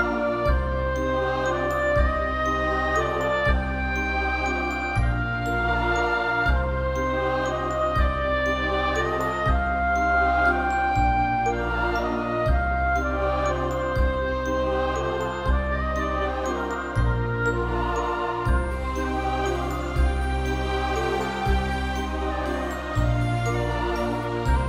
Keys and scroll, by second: 4.1-4.9 typing, 5.5 alt+shift+u, 5.8 Return.